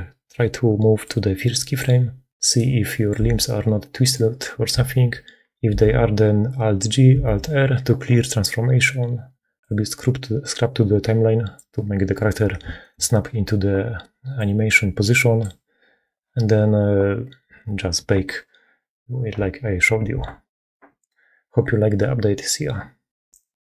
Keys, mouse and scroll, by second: 0.9 middle click, 2.4 click, 2.7 click, 3.0 a, 3.7 click, 5.6 alt+g, 7.0 alt+r, 9.5-11.6 drag, 12.6 shift+middle click, 12.7 shift+click, 12.8 shift+middle click, 14.2-15.4 drag.